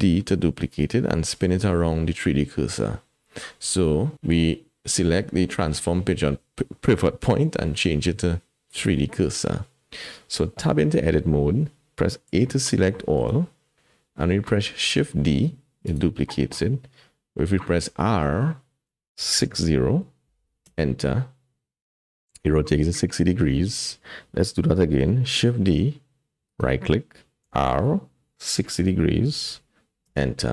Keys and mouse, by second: 4.1-8.8 drag, 10.6 Tab, 12.3 a, 12.9 shift+click, 14.8 shift+d, 17.8 r, 25.4 shift+d, 27.5 r.